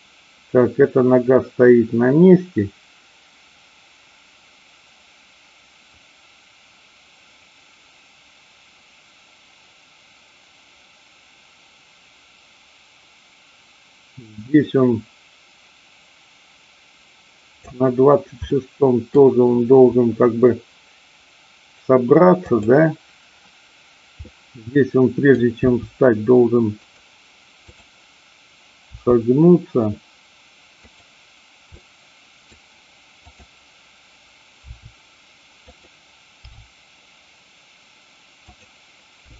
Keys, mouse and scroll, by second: 18.5-19.1 middle drag, 22.5-23.5 drag, 24.1-25.3 middle drag, 25.6 r, 27.5-28.6 drag, 28.7 r, 30.7 click, 31.7 middle click, 33.3 click, 34.6 r, 35.6 click, 36.4 g, 38.5 click, 39.1 r.